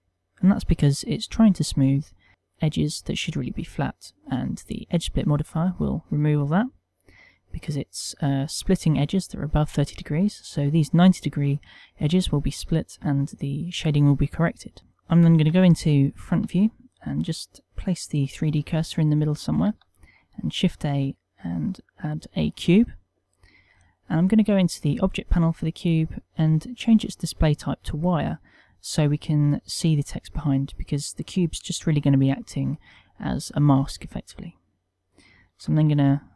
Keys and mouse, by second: 0.5 middle click, 2.5 middle click, 4.2 click, 6.6 middle click, 12.7 middle click, 14.6 middle click, 15.1 KP_1, 15.9 shift+middle click, 17.2 right click, 19.7 shift+a, 24.6 click, 25.6 middle click, 26.8 click, 35.5 s.